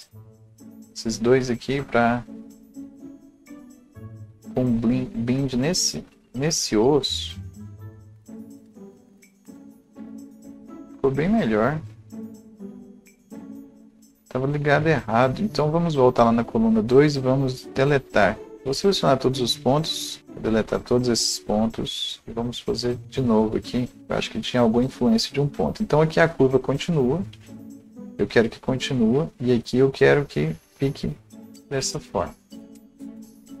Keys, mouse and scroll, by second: 2.5-23.0 alt+drag, 8.0 right click, 8.7 ctrl+z, 18.5 ctrl+a, 20.2 Delete, 21.0 Delete, 23.3 Delete, 23.3 click, 24.0-27.0 alt+drag, 27.3-31.8 right drag, 27.3-29.2 alt+drag, 28.4-29.0 alt+scroll up 1, 29.2-33.6 alt+drag, 31.8 right click, 32.7 ctrl+z.